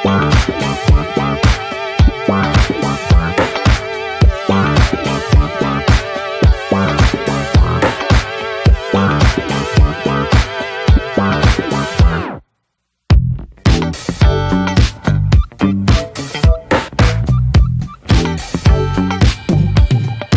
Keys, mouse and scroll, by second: 0.0 scroll down 1, 0.3-1.2 middle drag, 1.2 ctrl+j, 1.6-2.1 shift+middle drag, 2.1 ctrl+s, 2.5 shift+h, 2.9-4.5 middle drag, 4.5 drag, 6.3 click, 6.7-7.8 scroll down 11, 7.8 shift+middle click, 8.0-8.9 scroll up 4, 8.2 middle click, 8.7 shift+middle click, 9.0 middle click, 9.5 ctrl+s, 10.1-12.5 drag, 15.1 middle click, 15.7 ctrl+s, 17.1-17.9 drag, 17.9 middle drag, 18.1 scroll up 1, 18.3 ctrl+s, 18.6 Tab, 20.0 middle click.